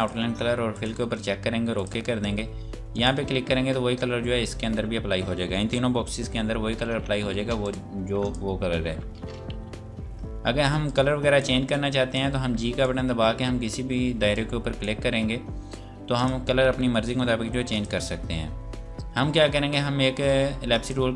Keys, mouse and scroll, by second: 6.2 f, 7.4 space, 7.6 click, 9.1 ctrl+space, 9.6 g, 10.9 click, 18.5-20.4 scroll up 1, 20.9 click.